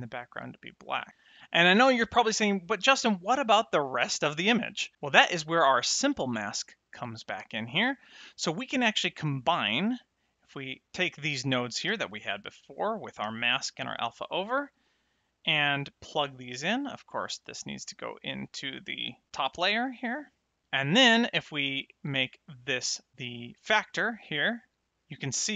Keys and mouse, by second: 6.5 click, 10.0 middle click, 11.8 g, 12.6 click, 13.2 h, 17.2 click, 20.1 middle click, 21.7 click.